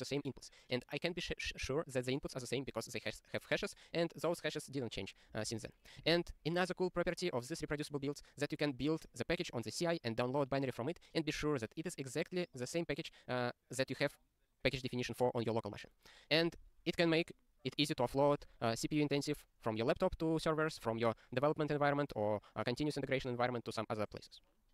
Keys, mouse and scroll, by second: 6.0 click.